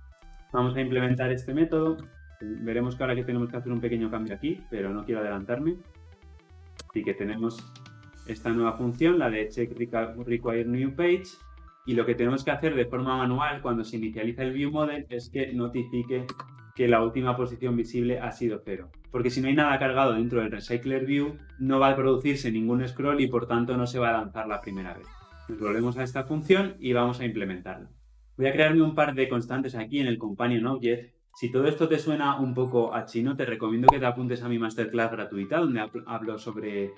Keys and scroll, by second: 0.2 ctrl+alt+l, 6.8 Return, 16.3 Return, 16.9 Return, 25.5 ctrl+b, 31.2 Return.